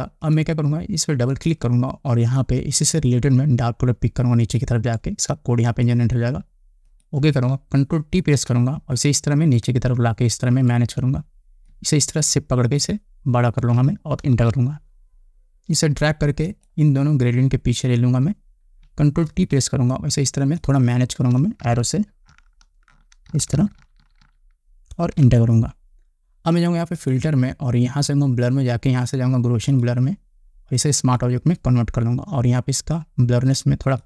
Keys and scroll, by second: 8.7 ctrl+t, 14.7 Return, 19.8 ctrl+t, 22.2 Up, 25.5 Return.